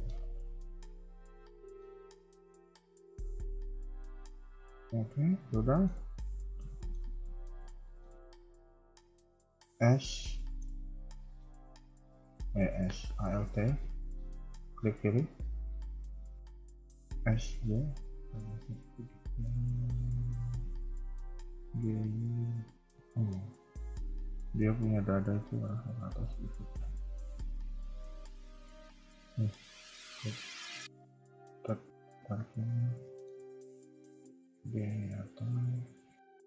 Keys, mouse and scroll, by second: 0.1 Tab, 0.8 middle click, 2.5 click, 3.3 shift+click, 3.6 g, 4.7 KP_1, 5.2 scroll down 2, 5.6 shift+middle click, 5.9-6.3 scroll up 2, 6.6-7.2 shift+scroll up 3, 6.6 shift+middle click, 7.4-7.8 scroll down 3, 7.8 shift+middle click, 8.0 scroll up 1, 8.0 KP_3, 9.6 alt+click, 10.2 shift+middle click, 10.7 scroll up 2, 12.8 a, 13.4 alt+click, 17.2 s, 21.6 g, 23.2 KP_1, 25.2 click, 25.4 g, 29.2 ctrl+z, 29.5 a, 29.7 a, 30.0 click, 30.2 g, 32.2 ctrl+click, 32.5 KP_3, 33.0 shift+middle click, 34.5 g.